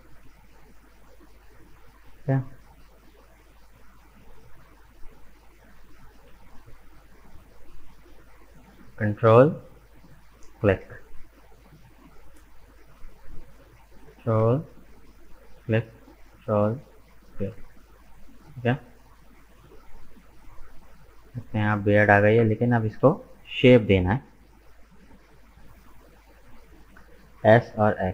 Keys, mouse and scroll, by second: 1.8-4.8 middle drag, 5.3-6.8 drag, 6.8 shift+middle click, 7.4-8.0 scroll down 2, 9.8-12.8 ctrl+drag, 15.1-17.8 ctrl+drag, 17.8-18.8 middle drag, 18.8-19.3 scroll up 2, 19.3-21.4 middle drag, 21.4-21.7 scroll down 1, 21.7-22.9 middle drag, 22.9 KP_1, 23.9-27.0 middle drag, 27.3 s.